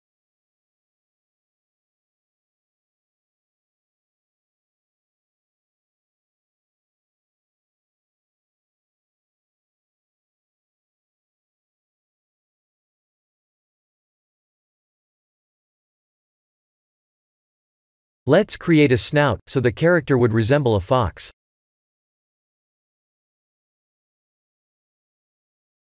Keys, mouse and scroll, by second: 0.5 click, 1.0 middle click, 5.5-5.8 scroll down 3, 5.8 shift+middle click, 6.4 middle click, 8.9 click, 9.2 Tab, 9.7 scroll up 2, 10.3 middle click, 10.3 scroll up 2, 14.1 ctrl+r, 15.4 ctrl+r, 17.7 3, 17.9 click, 18.4 shift+click, 19.3 middle click, 21.3 1, 21.9 click, 22.2 middle click, 23.9 KP_3, 25.2 click.